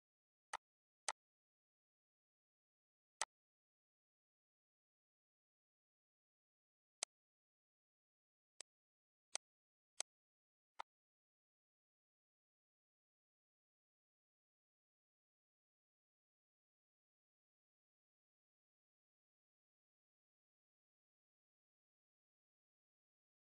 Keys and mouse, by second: 0.0 Delete, 0.3 click, 1.9 ctrl+g, 3.0 click, 6.7 Delete, 6.8 click, 7.5 ctrl+d, 8.3 click, 9.0 click, 9.8 click, 10.5 click.